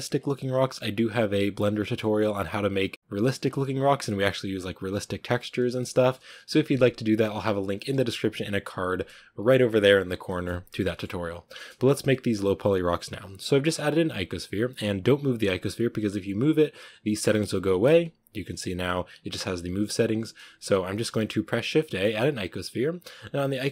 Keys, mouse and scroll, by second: 0.0 scroll down 1, 0.4 middle click, 0.8-1.7 scroll up 1, 1.7 scroll up 1, 1.9-3.3 middle drag, 3.3 scroll down 1, 5.8 scroll down 1, 5.8-17.5 shift+middle drag, 17.5 g, 20.5 x, 22.1 shift+a.